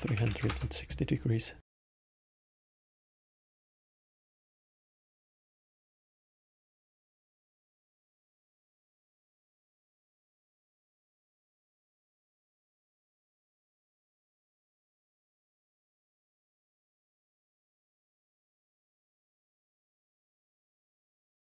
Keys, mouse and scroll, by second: 2.6 click, 5.5 click, 6.5 click, 7.0-11.9 drag, 12.6-14.3 drag, 15.0 middle click, 15.8-17.8 scroll down 1, 17.8 middle click, 18.7-19.2 scroll down 1, 19.2 middle click, 19.8-21.1 scroll down 1, 21.1 click.